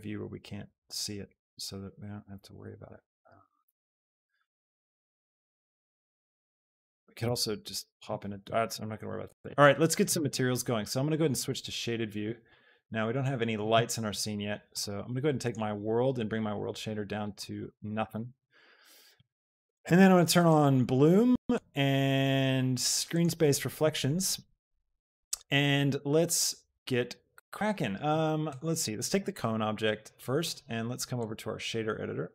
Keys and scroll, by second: 7.2 shift+Tab.